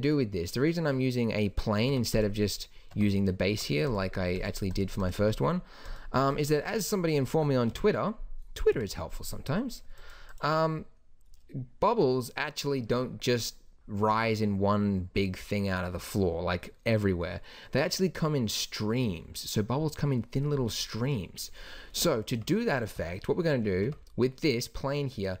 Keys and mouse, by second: 1.9 Tab, 2.9 Tab, 3.5 Tab, 7.7 KP_1, 7.8 KP_2, 8.7 KP_1, 22.0 Tab, 22.3 Tab, 23.8 Tab.